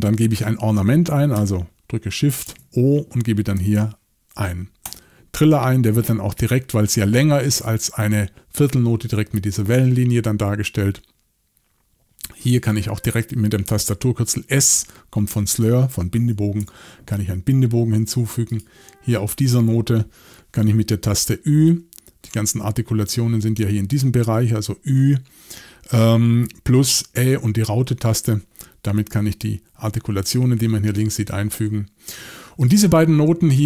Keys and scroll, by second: 2.4-4.2 typing, 4.8 Return, 16.6 s, 21.7 ü.